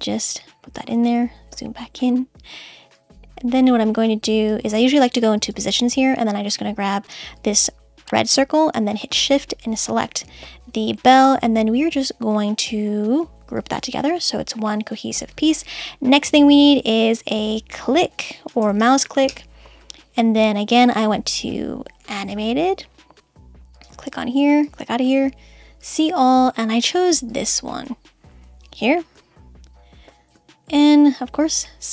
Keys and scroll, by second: 19.2 Return.